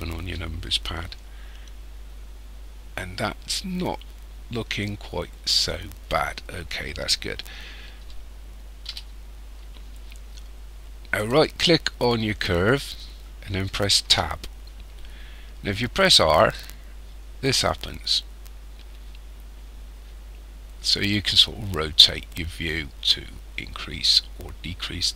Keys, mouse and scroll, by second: 1.3-2.8 scroll up 2, 8.9 KP_1, 11.2 right click, 14.1 Tab, 15.9 r.